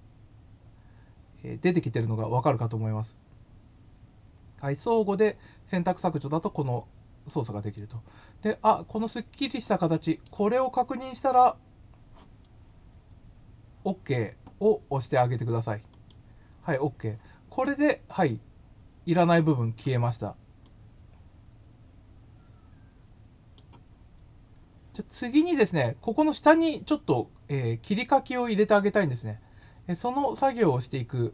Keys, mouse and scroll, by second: 7.2-10.2 middle drag, 12.6 scroll down 1, 13.0 scroll up 2, 15.9 click, 17.6-19.7 middle drag, 20.6-23.5 drag.